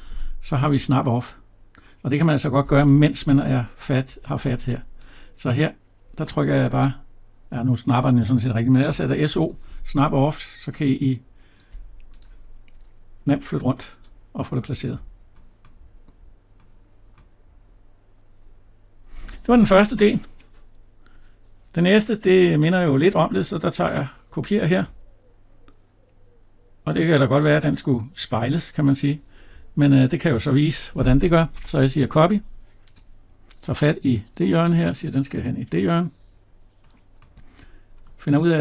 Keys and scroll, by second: 2.9 Escape.